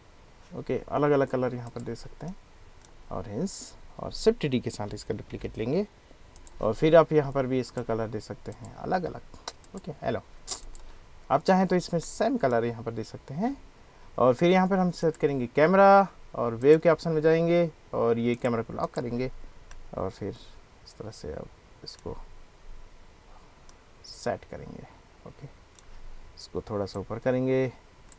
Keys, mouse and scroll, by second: 1.7 click, 2.3-2.8 drag, 5.5 shift+d, 6.4 click, 7.7 click, 8.6 drag, 12.1-12.6 drag, 15.0 click, 15.2 middle click, 16.7 click, 18.4 click, 18.8 click, 19.8-20.2 drag, 20.2-22.0 middle drag, 23.8 click, 26.9-28.1 drag.